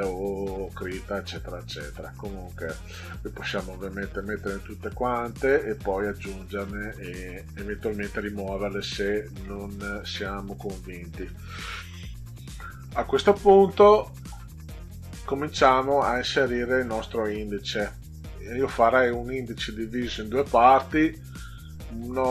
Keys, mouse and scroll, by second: 1.8 click, 7.2 click.